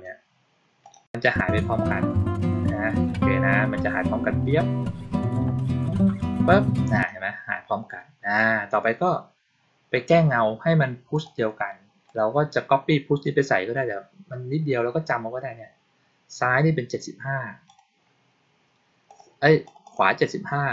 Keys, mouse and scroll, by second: 0.8 click, 6.9 click, 11.1 click, 12.0 click, 17.6 click, 19.0 click, 19.6 click, 19.8 click.